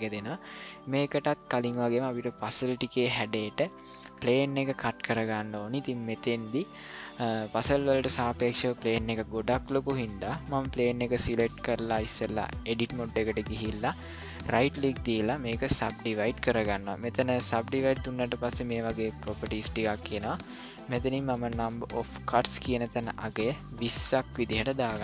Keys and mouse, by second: 1.2-2.9 ctrl+middle drag, 3.7-4.0 ctrl+middle drag, 6.6 ctrl+middle click, 11.1-12.7 drag, 14.4-15.8 right drag, 22.8-25.0 drag.